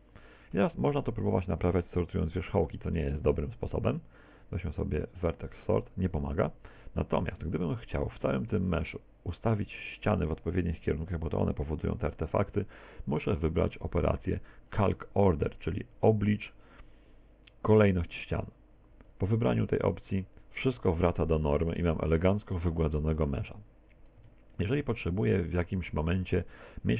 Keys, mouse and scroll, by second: 0.9 a, 2.8 ctrl+v, 6.7 Tab, 7.7 middle click, 8.6 scroll down 2, 9.0 shift+middle click, 19.1 click, 24.2 Tab, 25.1 middle click.